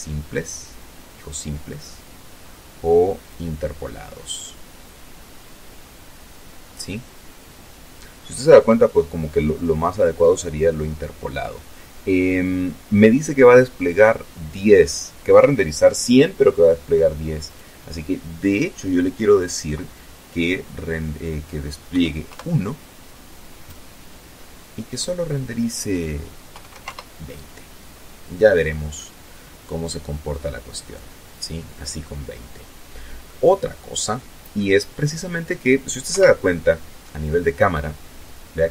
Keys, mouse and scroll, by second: 1.5 click, 15.7 click, 20.2 KP_1, 20.5 Return, 23.1 click, 24.8 2, 25.0 KP_0, 25.1 KP_Enter, 27.3-30.4 middle drag, 31.5-33.0 middle drag, 34.3 KP_0.